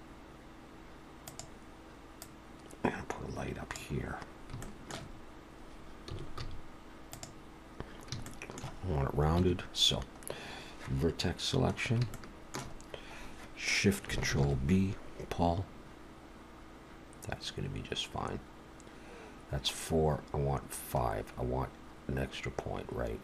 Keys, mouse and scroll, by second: 2.2 click, 4.3 scroll up 2, 4.6 shift+middle click, 5.2 scroll up 1, 6.1 s, 8.3 shift+middle click, 9.4 1, 11.7 scroll up 3, 12.1 shift+middle click, 14.3 ctrl+shift+b.